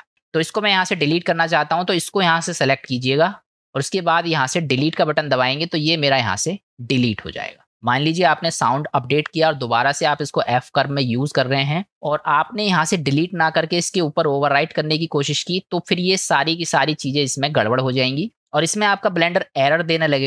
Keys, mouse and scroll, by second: 0.5 click, 4.8 Delete, 18.5 click.